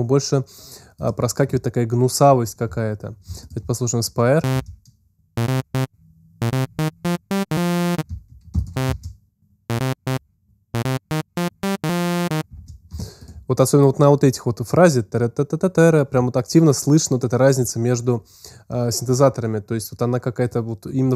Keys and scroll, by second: 4.4 alt+space, 8.4 alt+space, 9.6 space, 12.8 alt+space.